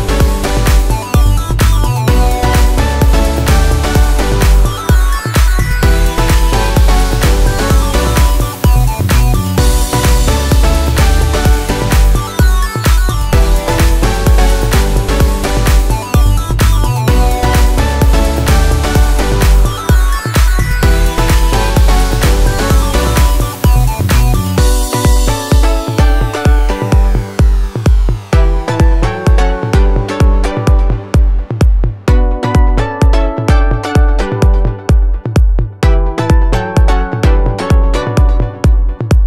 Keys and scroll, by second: 1.6 Escape, 5.4 F2, 7.3 F4, 9.4 F2, 12.6 Escape, 13.9 Delete, 17.9 Escape, 23.2 space, 23.5 F4, 26.4 shift+F2, 26.7 shift+Page_Up, 30.9 F3, 33.7 F4, 34.0 Escape, 37.0 F2.